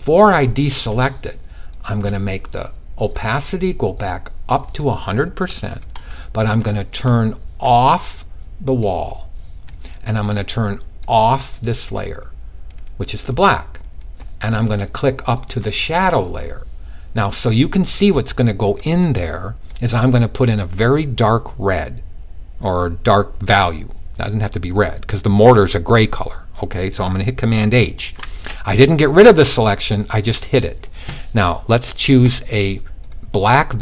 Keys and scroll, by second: 27.6 super+h.